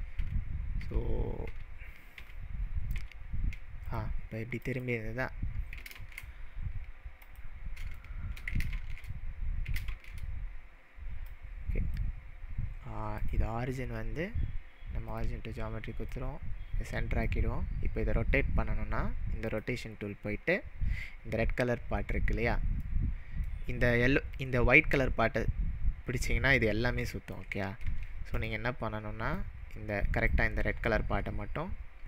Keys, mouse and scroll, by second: 0.8 ctrl+z, 1.6 ctrl+z, 3.1 ctrl+z, 3.8 click, 4.7 ctrl+z, 4.7 click, 5.9 ctrl+shift+z, 7.2 click, 8.0-8.5 shift+middle drag, 8.7 ctrl+shift+z, 9.9 ctrl+shift+z, 10.1 ctrl+shift+z, 11.3-12.2 drag, 13.2-16.1 drag, 19.5-22.6 drag, 22.9-23.7 middle drag, 24.3-27.4 click, 27.9 ctrl+z, 28.3 click, 28.8 click, 29.4-30.3 drag.